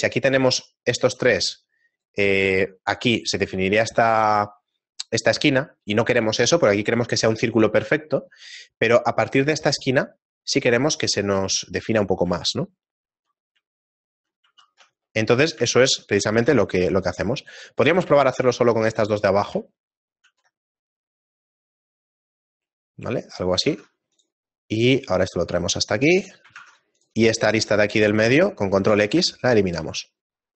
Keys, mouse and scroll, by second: 15.2 middle click, 15.7 shift+middle click, 16.3 ctrl+Tab, 17.3 right click, 17.7 middle click, 18.3 shift+right click, 18.5 shift+middle click, 20.8 ctrl+b, 23.6 ctrl+Tab, 24.5 scroll up 1, 25.4 right click, 26.5 ctrl+Tab, 27.3 right click, 27.7 right click, 28.9 ctrl+x, 29.3 shift+middle click, 29.9-30.5 scroll down 1.